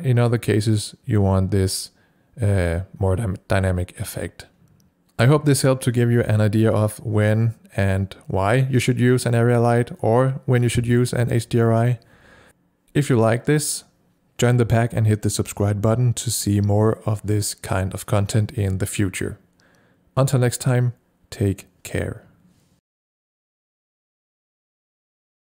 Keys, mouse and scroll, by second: 0.3-4.9 drag.